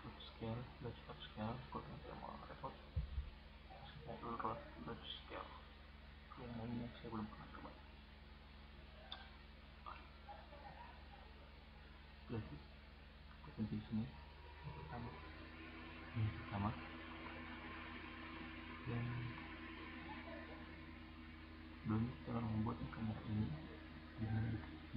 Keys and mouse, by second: 0.6-1.6 middle drag, 4.8-5.9 middle drag, 14.5-16.0 middle drag, 18.9-19.2 middle drag, 20.1-20.8 middle drag, 21.4-22.5 middle drag.